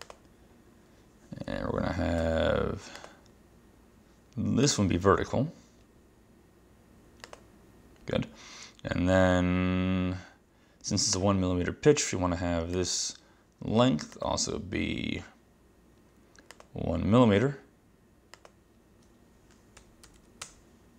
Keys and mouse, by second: 2.3 Escape, 3.1 click, 4.7 click, 7.3 click, 12.0 Escape, 12.8 click, 14.2 click, 16.6 click, 18.4 click, 19.6-20.7 typing.